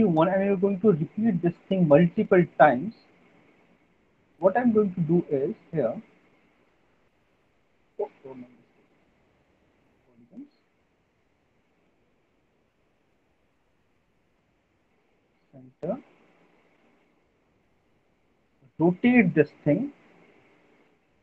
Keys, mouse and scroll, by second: 1.0 alt+middle click, 2.0 click, 2.8 click, 3.9 click, 5.0 click, 6.3 right click, 7.3 click, 8.4 ctrl+z, 10.0 click, 10.0 right click, 10.9 alt+middle click, 12.5 middle click, 15.4 click, 16.0 alt+middle click, 16.4 middle click, 16.6 middle click, 16.7 alt+middle click, 16.8 alt+middle click, 17.4 alt+middle click, 17.8 middle click, 18.6 middle click, 20.9 click, 21.1 click.